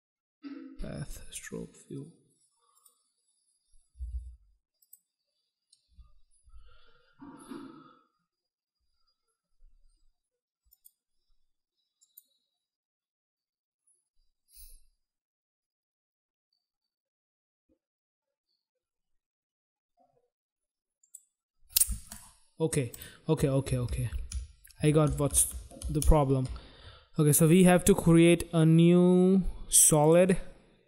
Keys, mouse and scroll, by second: 2.7 click, 3.9 m, 4.1 m, 4.8 click, 10.4 click, 12.0 click, 21.0 click, 21.8 right click, 22.9 click, 23.6 ctrl+z, 27.3 right click, 29.9 click.